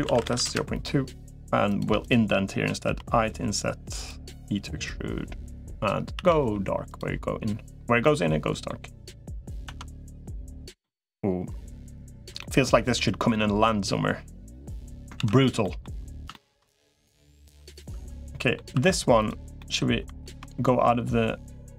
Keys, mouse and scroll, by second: 1.8 shift+click, 2.6 i, 4.0 e, 6.0 a, 6.4 g, 7.8 middle click, 8.8 middle click, 9.6 Tab, 10.6-12.0 middle drag, 12.2 shift+middle click, 12.5-14.4 middle drag, 14.4 click, 15.0 ctrl+s, 15.4 middle click, 16.1 middle click, 17.8 Tab, 18.1 middle click, 18.6 2, 19.0 click, 19.4 middle click, 20.0 ctrl+b.